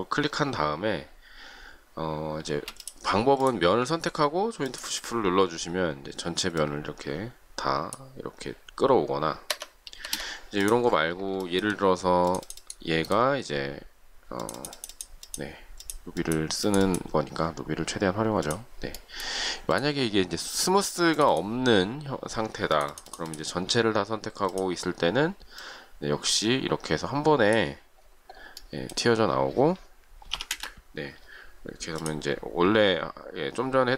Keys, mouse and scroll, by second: 2.4 space, 9.4 Escape, 9.9 space, 10.0 Escape, 11.4 shift+middle click, 29.8-30.7 typing.